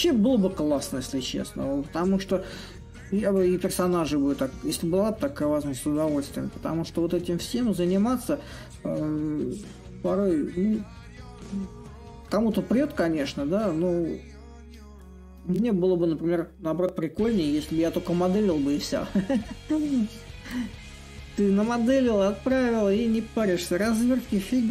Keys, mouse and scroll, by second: 3.7-8.8 drag, 9.2 click, 21.6-24.7 drag.